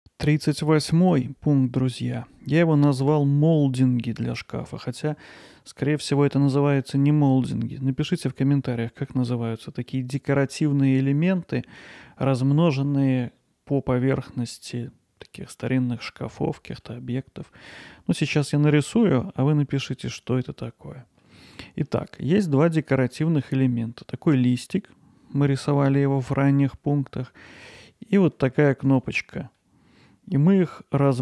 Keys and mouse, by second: 4.5 middle click, 5.4 middle click, 16.8 middle click, 17.8-19.2 middle drag, 19.9-21.2 alt+middle drag, 21.5 middle click, 22.8 middle click, 28.9 click, 29.6-30.1 middle drag, 30.4 middle click.